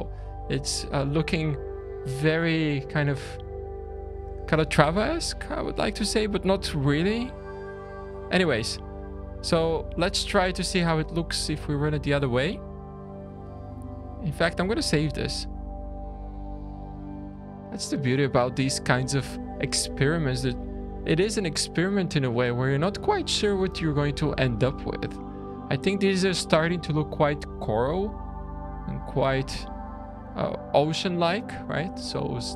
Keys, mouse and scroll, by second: 9.0 middle click, 9.5-10.0 scroll down 1, 10.0 scroll down 2, 13.6 scroll down 2, 14.0 shift+middle click, 14.8-15.3 scroll up 3, 16.3 shift+d, 18.4 scroll down 4, 19.0 click, 19.6 Tab, 20.9 s, 21.8 Tab, 22.6 shift+middle click, 25.4 middle click, 26.2 scroll up 3, 28.2-28.5 scroll down 2, 28.5 middle click, 29.7 `, 31.1 middle click, 31.8 scroll down 2, 32.2 shift+middle click.